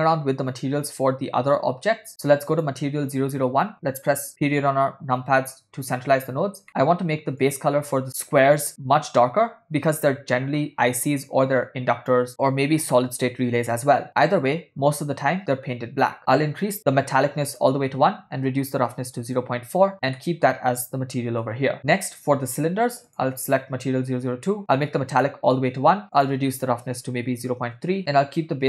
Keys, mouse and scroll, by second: 0.9 click, 2.5 click, 5.2 KP_Decimal, 6.7 ctrl+middle click, 7.6 click, 16.2 click, 17.5-19.5 drag, 20.4-21.6 middle drag, 21.8 middle click, 23.1-23.8 drag, 24.6 click, 26.2-28.0 drag.